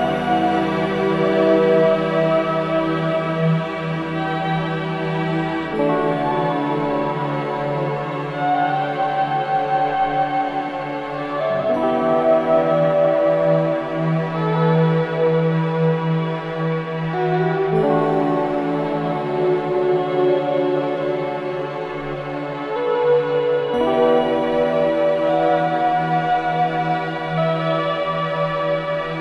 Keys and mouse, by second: 5.0 click, 5.9 click, 7.0 click, 9.5-13.7 drag, 14.7 click, 15.4 click, 15.6 click, 17.6-21.4 drag, 22.8 space, 23.3 click, 23.9 space, 25.7 space, 26.8 click.